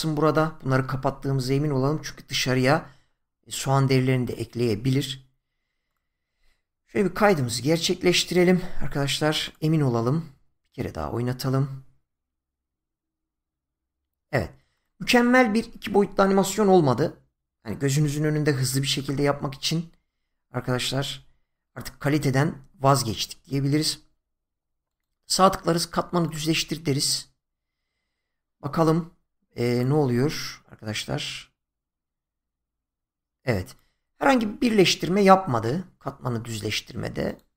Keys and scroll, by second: 7.0 ctrl+s.